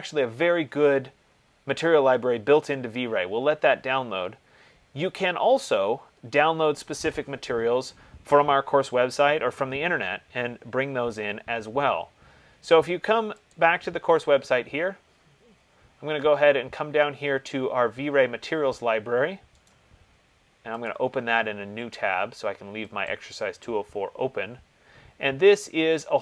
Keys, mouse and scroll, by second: 13.8 click, 14.7-17.5 scroll, 17.5 middle click, 19.9 right click, 21.1 click, 23.2 click, 24.9-25.6 scroll, 25.6-26.0 scroll.